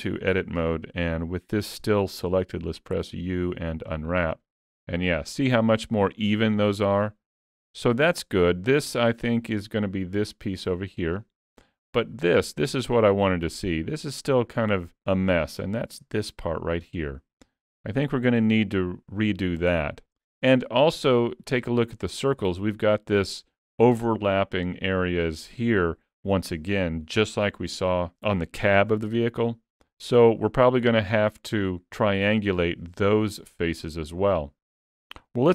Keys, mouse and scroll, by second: 2.6 u, 9.2 click, 12.2 scroll up 3, 12.5 shift+middle click, 18.0-18.4 scroll down 2, 18.6 shift+middle click.